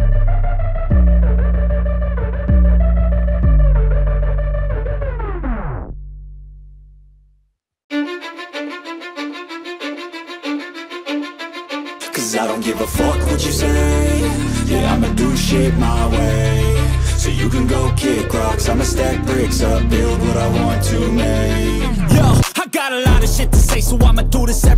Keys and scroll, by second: 16.8-21.5 typing.